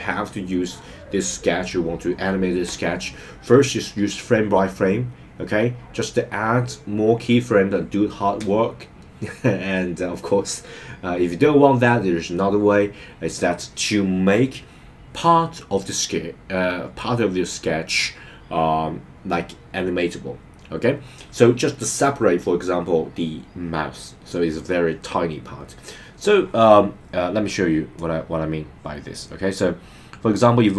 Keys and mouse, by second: 27.9-30.7 drag.